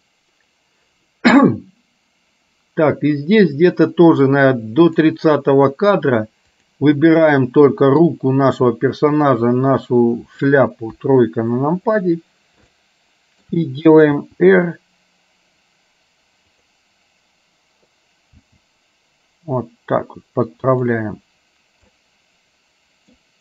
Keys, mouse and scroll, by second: 6.6 click, 6.6 right click, 7.2 middle click, 7.2 right click, 9.2 shift+click, 11.0 KP_3, 12.8 middle click, 14.3 r, 18.5 g, 22.0-23.2 middle drag.